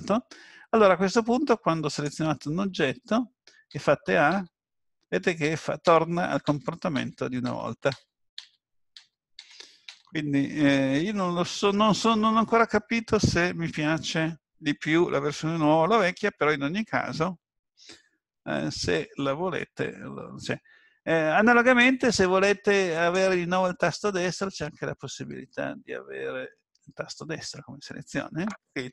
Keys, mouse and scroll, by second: 1.9 click, 3.8 a, 4.4 a, 5.4-9.8 typing, 21.7 click.